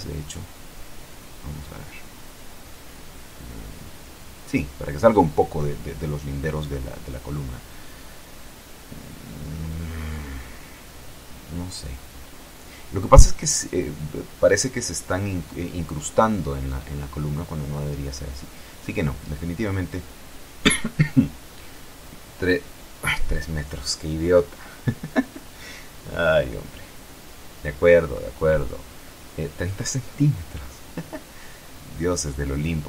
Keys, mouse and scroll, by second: 0.5-4.8 drag, 6.8 F12, 19.4 Escape, 20.6 click, 21.7 KP_3, 21.9 KP_Enter, 24.5 click, 27.9 KP_Decimal, 28.2 KP_Enter, 31.1 click, 32.4 Home, 32.6 Right.